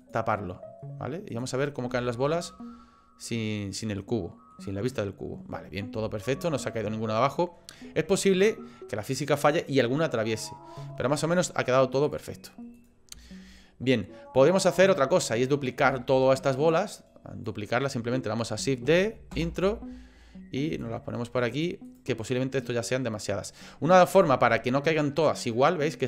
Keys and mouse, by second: 0.0 click, 1.3 click, 2.1-3.9 shift+middle drag, 4.1 middle click, 6.1 shift+middle click, 12.1 click, 12.8 click, 13.4 shift+middle click, 14.5 shift+middle click, 14.9 shift+middle click, 16.1 shift+middle click, 16.7 click, 18.9 shift+d, 20.9 click, 24.1 ctrl+z.